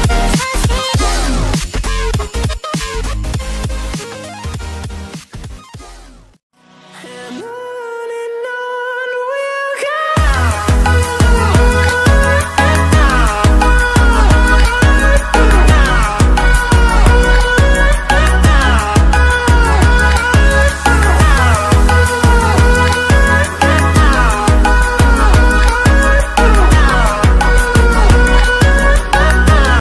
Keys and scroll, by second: 1.4 ctrl+d.